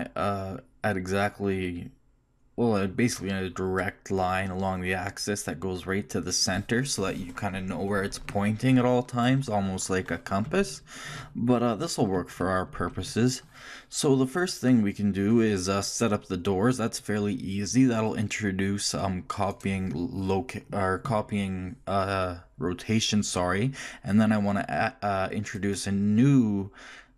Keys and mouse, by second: 15.0 shift+middle click, 19.5-21.0 drag, 21.0 right click, 25.5-27.1 right drag.